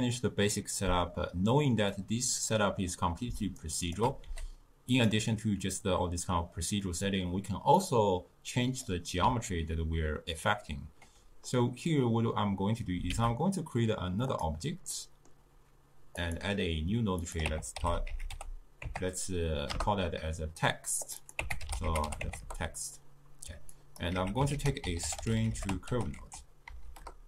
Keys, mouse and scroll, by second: 2.0-3.7 middle drag, 3.7 shift+right click, 4.3 g, 6.9-7.9 middle drag, 7.9 click, 13.2 shift+a, 15.0-16.3 middle drag, 16.3-20.4 drag, 21.1 click, 21.3-24.3 drag, 24.3 x, 24.6 ctrl+a.